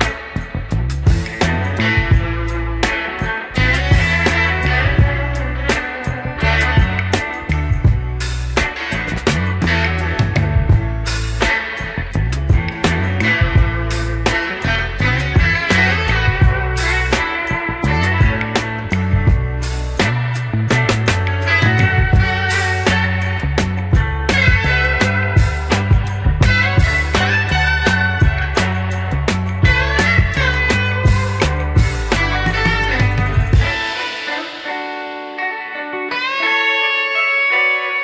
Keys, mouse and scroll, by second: 0.4 click, 1.0 click, 1.3 Tab, 2.2 KP_1, 3.5 1, 4.0 scroll up 3, 6.0 a, 9.6 g, 11.1 ctrl+z, 14.2 click, 15.5 x, 18.0 click, 19.2 x, 20.9-23.4 middle drag, 24.0 middle click, 27.8 KP_1, 29.3 click, 30.0 click, 31.1 shift+click, 32.0 x, 32.9-33.6 scroll up 2, 33.9 shift+click, 35.0 shift+click, 36.1 g.